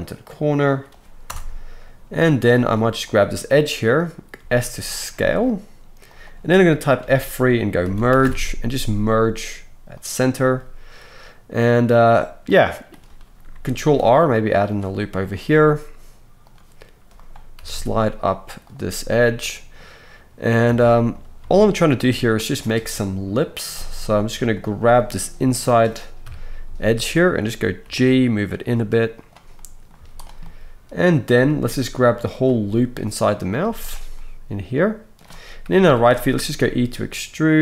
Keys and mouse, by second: 4.4 s, 7.0 F3, 13.7 ctrl+r, 16.5 middle click, 17.2-21.3 right drag, 17.5 g, 20.6 alt+a, 21.3-28.5 shift+drag, 21.7 alt+shift+middle click, 21.7 alt+shift+right click, 26.2 KP_3, 26.6 z, 27.8 g, 28.5-33.6 right drag, 29.9 z, 31.9 shift+middle click, 33.6-37.6 drag, 33.6 z, 35.6 KP_3, 36.6 e.